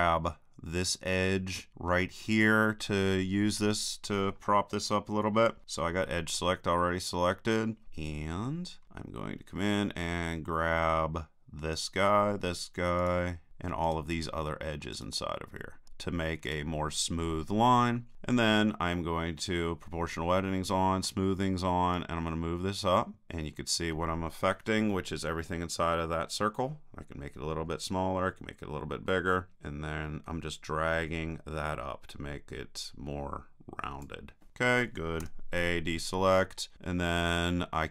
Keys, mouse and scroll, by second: 6.8-11.0 middle drag, 11.7-18.1 right drag, 21.9-23.3 drag, 35.2 a, 35.7 click, 35.9-37.8 middle drag.